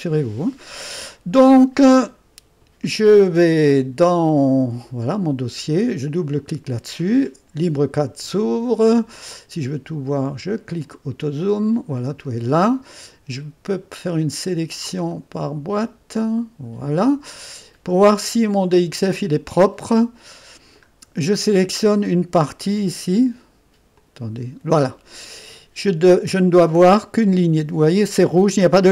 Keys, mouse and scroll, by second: 3.8-5.7 drag, 6.2 click, 10.9 click, 13.7-17.5 drag, 17.5-18.1 scroll up 1, 18.1 right click, 19.8 middle click, 20.1 middle click, 23.9-25.8 drag, 25.8-26.9 scroll up 1.